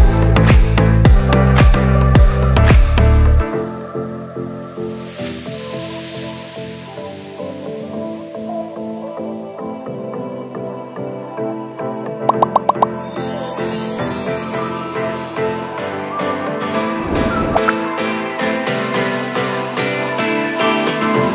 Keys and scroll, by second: 4.5 ctrl+-, 10.2 space.